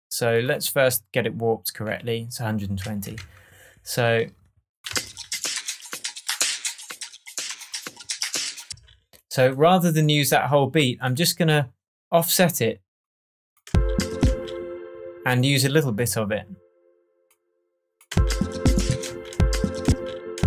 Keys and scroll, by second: 3.1 shift+Tab, 4.8 space, 8.6 space, 13.6 space, 18.1 space.